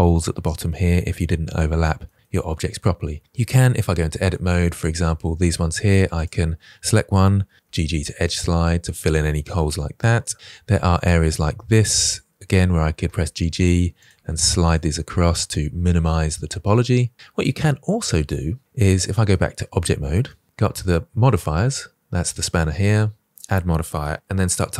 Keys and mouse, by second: 0.9 middle drag, 1.9 middle click, 3.7 Tab, 4.2 middle click, 8.0 g, 8.1 g, 10.5 click, 12.0 click, 12.7 g, 12.8 g, 13.2 click, 13.7 g, 13.8 g, 14.3 middle click, 18.7 Tab, 19.5-20.1 middle drag, 23.3-24.7 drag.